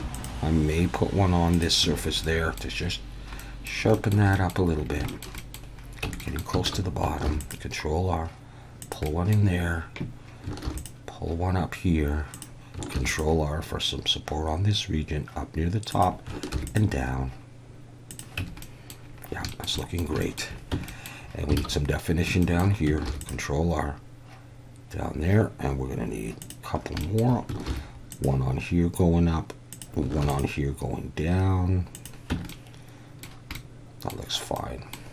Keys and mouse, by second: 1.5 click, 1.8 Tab, 2.2-2.6 middle drag, 3.4 middle drag, 3.9 shift+middle drag, 4.3 middle click, 5.1 shift+middle drag, 5.4 middle click, 6.0 Tab, 6.2 middle click, 6.7 alt+a, 7.2 ctrl+r, 8.8 click, 9.2 middle click, 10.6 ctrl+r, 12.3 click, 12.9 ctrl+r, 15.9 click, 16.5 ctrl+r, 18.1 click, 18.4 Tab, 18.6 middle drag, 19.5 shift+middle drag, 19.8 middle drag, 20.2 shift+middle drag, 20.7 Tab, 20.9 middle click, 21.6 alt+a, 22.4 shift+middle click, 23.1 ctrl+r, 26.4 click, 27.1 shift+middle click, 27.7 ctrl+r, 29.7 click, 30.2 ctrl+r, 31.9 click, 32.3 Tab, 32.5-33.2 middle drag, 33.5-34.1 middle drag, 34.6-34.9 middle drag.